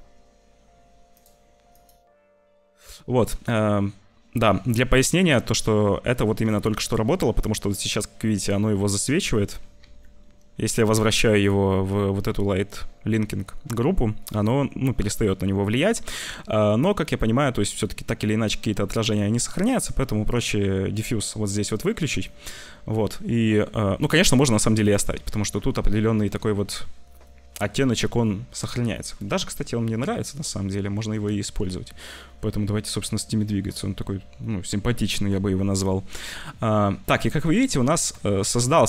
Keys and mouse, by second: 1.7 click, 9.8 ctrl+z, 17.3 shift+middle click, 20.2 click, 20.2 middle click, 21.2 middle click, 22.0 shift+middle click, 24.7 click, 26.8 middle click, 28.8 shift+middle click, 36.3 middle click, 37.6 shift+middle click.